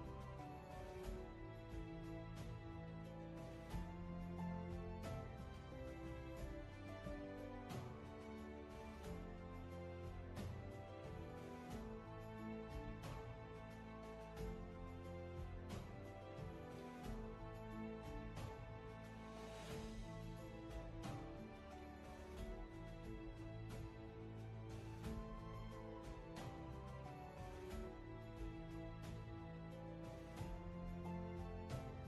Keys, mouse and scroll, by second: 28.5 ctrl+z.